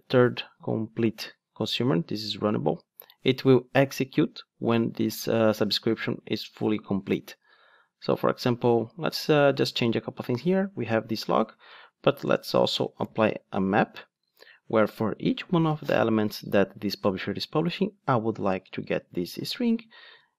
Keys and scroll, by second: 13.6 Return.